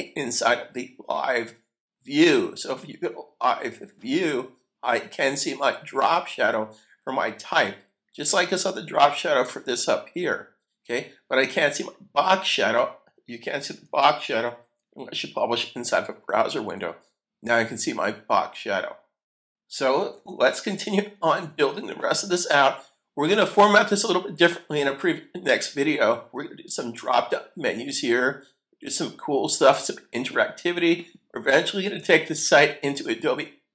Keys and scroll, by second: 14.4 super+F12, 20.1 super+Tab.